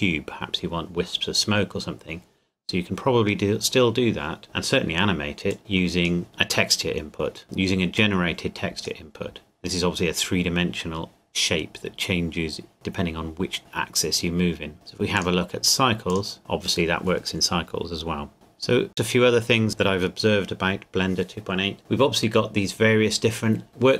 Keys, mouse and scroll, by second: 4.5-5.5 scroll down 1, 5.5 click, 8.0 click, 15.1 click, 18.9 click.